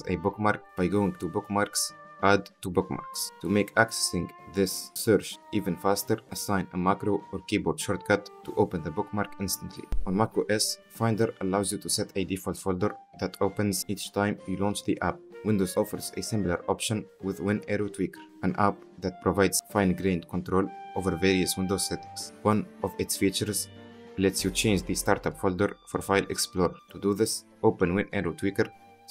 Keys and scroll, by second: 15.3 Escape, 16.0 ctrl+alt+space, 16.1-18.7 typing, 19.1 Return, 28.3-29.1 typing.